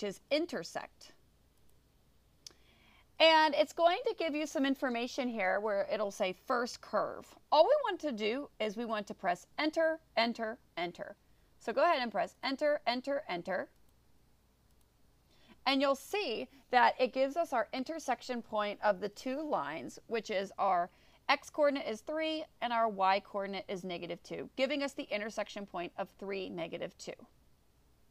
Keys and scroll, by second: 1.7 5, 12.5 Return, 13.9 Return, 14.8 Return.